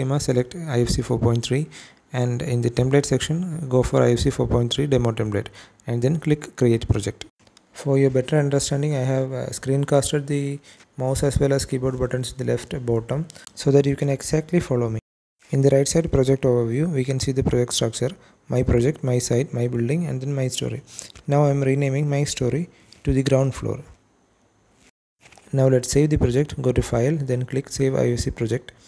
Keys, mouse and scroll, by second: 3.6-4.6 drag, 6.7 click, 11.6-12.0 scroll down 2, 12.0-12.3 scroll up 3, 12.3-14.7 scroll down 1, 15.2 t, 15.7 t, 16.1 t, 20.9 click, 21.1-25.6 drag, 25.0 o, 27.3-28.4 drag.